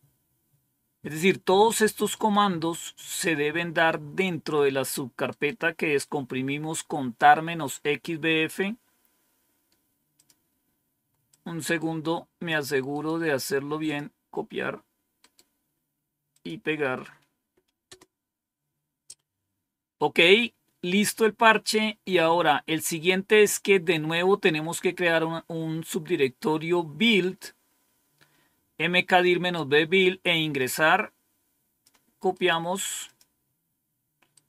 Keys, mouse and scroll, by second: 2.0 right click, 3.0 click, 5.1 right click, 5.5 right click, 10.0 click, 11.1-13.1 drag, 12.9 right click, 13.7 click, 15.0 right click, 16.1 click, 17.7 Return, 22.8-23.6 scroll down 1, 30.4-31.7 drag, 32.3 right click, 32.9 click, 32.9 right click, 34.2 right click.